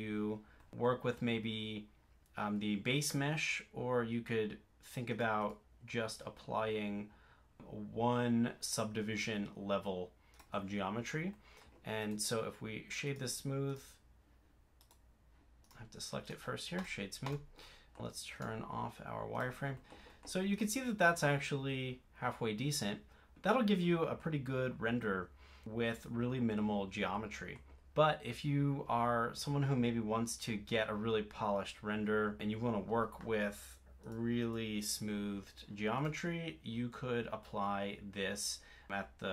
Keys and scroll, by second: 28.9 super+z, 32.7 super+z.